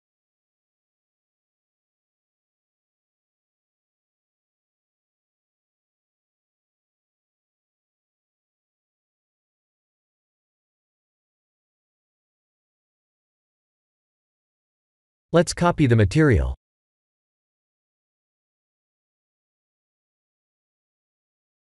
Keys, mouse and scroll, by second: 0.5 click, 1.8 click, 7.1 click, 7.7 click, 11.6-12.7 scroll down 6, 12.7-13.6 scroll down 3, 13.6-14.0 scroll up 4, 14.6 click, 15.3 shift+click, 16.4 click, 17.7 click, 19.3 click.